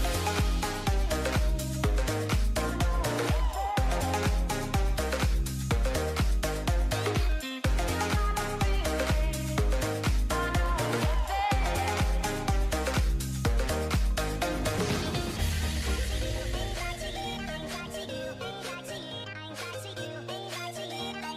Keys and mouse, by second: 0.1-1.1 typing, 1.2 Tab, 3.1 alt+h, 4.1-4.5 right drag, 4.5 z, 4.6 z, 5.5 ctrl+j, 6.1 a, 6.2 click, 6.6 shift+h, 7.7 Tab, 8.3 alt+h, 8.8 a, 8.9 a, 10.2 a, 11.6 z, 14.5 z, 15.0 shift+h, 16.9 a, 17.4 a, 17.9 k, 20.9 a.